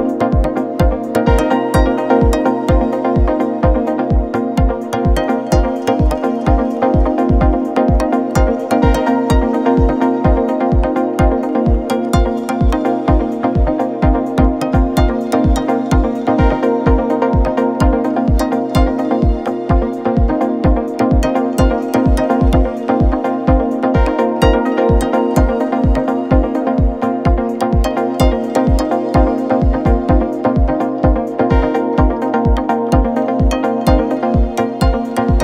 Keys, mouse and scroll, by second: 3.6-6.6 drag, 6.6 scroll down 2, 7.1-8.9 middle drag, 8.9 shift+a, 13.4 g, 16.1 KP_1, 17.8 KP_3, 19.4 ctrl+KP_1, 20.9 g, 24.7 r, 28.2 r, 31.4 r, 34.5 g.